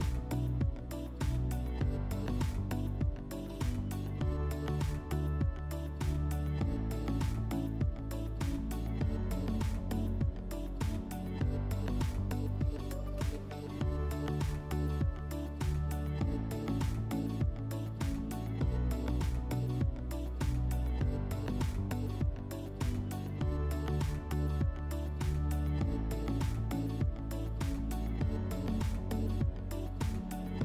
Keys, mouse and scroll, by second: 3.9 click, 4.4 click, 5.5 click, 19.2 click, 19.4 click, 19.8 2, 20.3 Return, 25.8 click, 27.0 click, 27.2 click, 27.3 2, 27.9 Return.